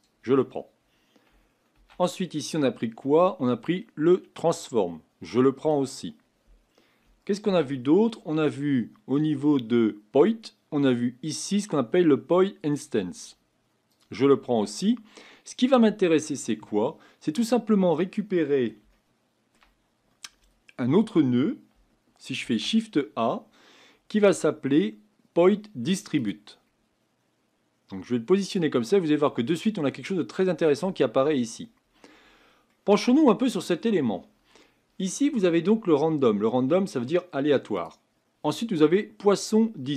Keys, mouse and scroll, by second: 16.8-17.3 scroll up 2, 17.4-17.8 scroll down 1, 18.9-28.4 shift+middle drag.